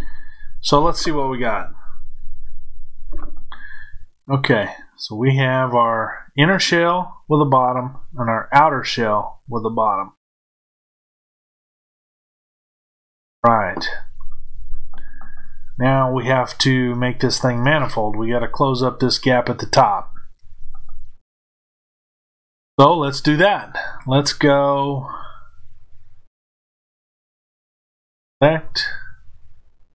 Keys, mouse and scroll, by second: 1.1-2.4 scroll down 1, 2.4-27.8 middle drag, 27.8 click.